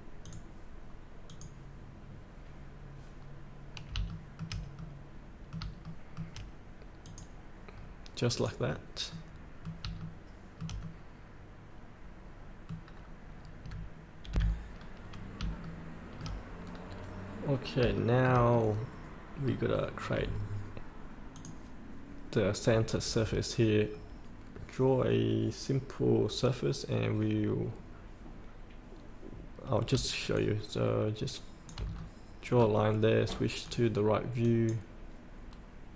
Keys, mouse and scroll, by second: 3.3 scroll up 1, 4.0 shift+middle click, 4.8 middle click, 6.0 shift+middle click, 7.0 click, 7.7 scroll up 1, 8.4 click, 8.7 scroll up 1, 9.1 middle click, 10.0 shift+middle click, 10.8 middle click, 11.2 middle click, 12.4 middle click, 12.9 scroll down 1, 14.3 F8, 14.8 scroll up 1, 15.6 shift+middle click, 16.6 scroll down 1, 17.5 scroll up 2, 18.0 shift+middle click, 18.5 middle click, 19.6 scroll down 1, 21.3 click, 23.2 scroll down 1, 24.5 scroll up 1, 30.3-31.7 shift+drag, 31.9 scroll down 1, 32.5 scroll up 1, 33.6 click.